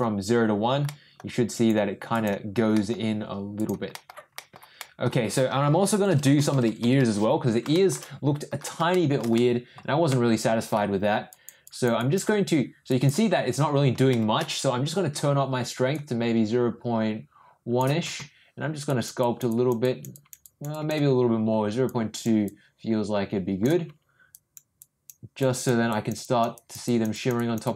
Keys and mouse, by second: 0.9 middle click, 1.5 click, 2.1 click, 2.7 middle click, 3.5 click, 3.9 middle click, 4.3 middle click, 4.8 middle click, 5.9-7.0 typing, 7.7 middle click, 8.9 middle click, 9.3 middle click, 10.0 middle click, 11.3 click, 11.6 click, 11.9 click, 12.8 click, 14.1 shift+middle click, 15.9-17.8 drag, 18.9 click, 19.2 click, 19.5 click, 19.8 click, 20.1 click, 20.4 click, 20.7 click, 21.9 click, 22.4-23.7 drag, 24.3 click, 24.8 click, 25.4 click, 25.9 click, 26.2 click, 26.5 click, 26.8 click, 27.1 click, 27.3 click, 27.6 click.